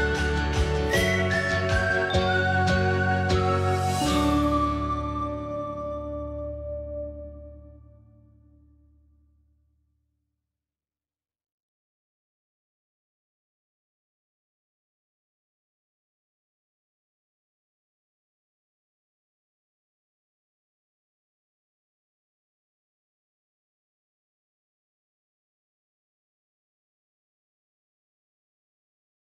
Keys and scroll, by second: 3.2 Down, 3.5 BackSpace, 3.7 BackSpace, 4.0 1, 4.2 Return, 17.6 scroll up 1, 21.9 1, 27.4 Escape, 27.6 Escape, 28.1 ctrl+h, 28.4 ctrl+h.